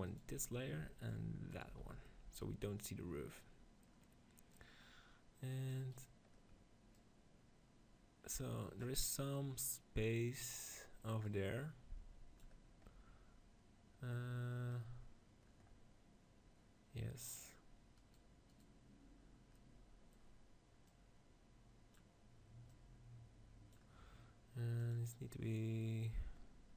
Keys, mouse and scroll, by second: 2.0-3.6 middle drag, 4.4-6.2 drag, 5.8 right click, 6.4-8.7 drag, 6.8 right click, 8.9-11.1 middle drag, 11.1-13.0 drag, 17.9-20.4 right drag, 19.5-20.7 middle drag, 20.7-26.7 drag.